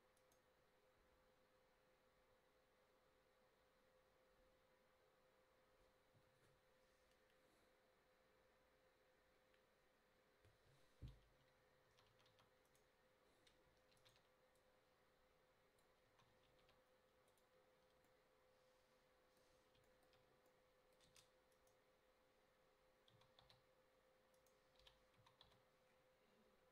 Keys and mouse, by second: 15.0 a, 15.0 shift+d, 16.1 s, 21.2 Tab, 23.3 s, 24.9 o, 25.2 s.